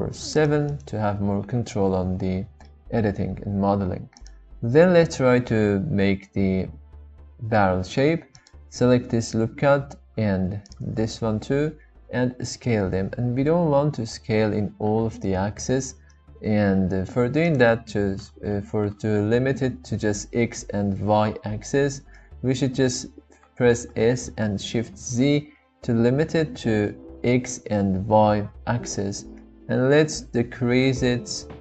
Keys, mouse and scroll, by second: 0.7-2.0 right drag, 2.7 shift+middle click, 4.1 click, 13.1 s, 17.4 right click, 23.9 s, 24.9 shift+z.